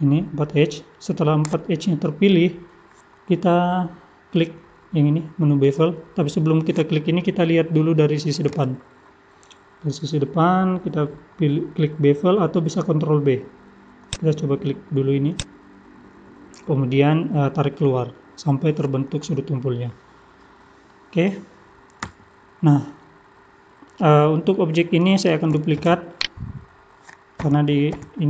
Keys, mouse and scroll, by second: 8.5 KP_1, 8.9 scroll up 2, 9.7-10.5 scroll up 1, 14.0 click, 15.3 click, 19.9 middle click, 22.0 Tab, 22.6 scroll down 2, 23.0 middle click, 25.9 shift+d, 27.4 g.